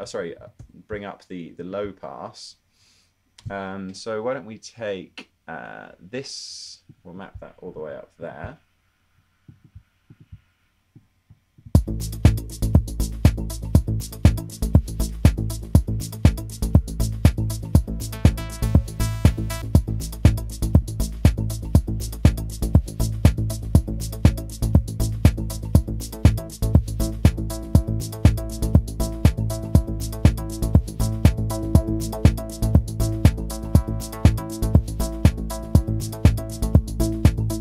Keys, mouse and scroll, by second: 0.0-0.6 typing, 8.0 super+z, 11.8 space, 19.7 super+z.